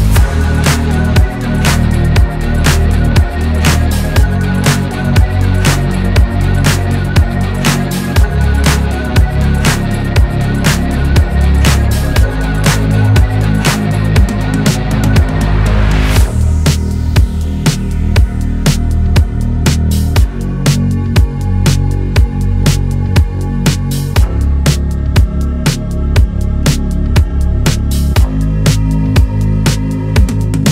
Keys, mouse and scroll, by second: 0.0-0.3 typing, 0.9 click, 1.1-1.7 middle drag, 1.7-2.1 scroll up 1, 2.1 scroll down 2, 2.3-3.0 middle drag, 3.0-3.4 scroll up 2, 3.4 click, 3.8 s, 4.7 click, 5.4-5.9 middle drag, 5.9 KP_7, 6.1 scroll up 2, 6.6 g, 7.5 r, 8.7-9.1 scroll down 3, 8.9 click, 9.1-9.7 middle drag, 9.7-10.1 scroll down 1, 10.1 scroll up 1, 10.3 middle click, 10.9 scroll down 4, 11.5-11.9 scroll up 1, 12.3 click, 12.7 g, 14.5-14.9 scroll up 1, 15.6 shift+click, 16.8 ctrl+p, 17.1 click, 17.2 scroll down 2, 17.4 middle click, 17.6-18.2 scroll up 2, 19.5 click, 19.9 scroll up 2, 20.1 middle drag, 20.4 scroll down 1, 20.8 click, 21.3 click, 21.9-22.4 middle drag, 23.3 click, 23.4 middle click, 25.1 click, 25.5 scroll down 1, 25.7 middle drag, 26.0-26.5 scroll up 3, 26.5-27.5 middle drag, 27.5 scroll down 1, 27.7 shift+middle drag, 27.9 scroll up 2, 29.0 middle click, 29.3-29.9 drag, 29.9 /.